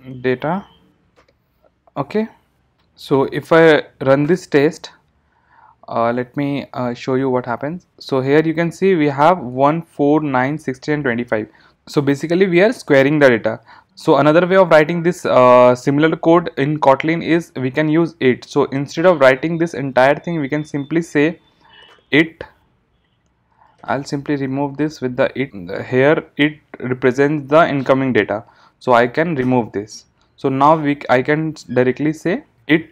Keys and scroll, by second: 4.3 ctrl+shift+r.